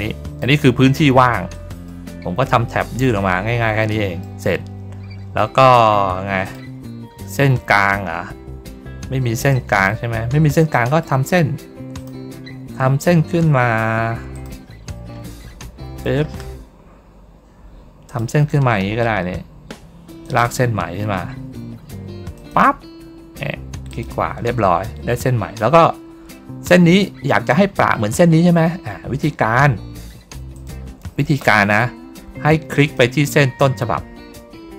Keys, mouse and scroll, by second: 1.4 middle click, 2.6 middle click, 3.8 middle click, 6.3 click, 7.1 middle click, 9.4 middle click, 10.1 ctrl+middle click, 10.6 middle click, 11.8 click, 14.2 click, 15.2 middle click, 18.0 click, 20.1 click, 22.2 click, 23.8 right click, 25.4 ctrl+middle click, 26.1 ctrl+middle click, 30.4 click, 32.7 ctrl+click.